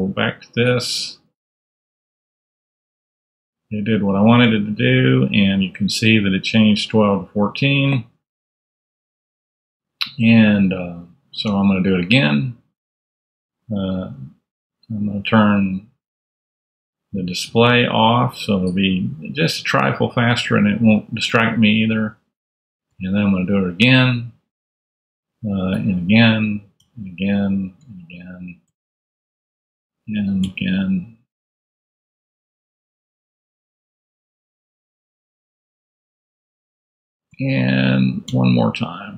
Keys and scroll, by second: 2.2 alt+n, 11.4 alt+n, 13.9 super+Tab, 19.4 super+Tab, 22.8 alt+n, 25.7 alt+n, 28.7 alt+Tab, 29.4 alt+n, 30.4 alt+Tab, 31.2 alt+n, 32.2 alt+Tab, 32.9 alt+n, 34.8 alt+Tab, 35.6 alt+n, 37.5 alt+Down, 38.2 alt+n.